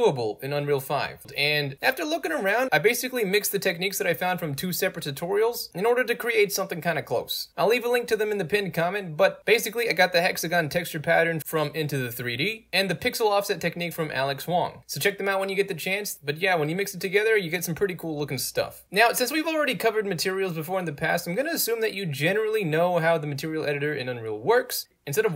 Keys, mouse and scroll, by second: 6.7 click, 9.4 click, 12.0 click, 12.7 click, 15.1 click, 17.1 click, 17.4-18.7 drag, 19.2-20.3 drag, 21.1 click, 22.3 i, 22.3-22.8 drag, 23.6-25.0 drag.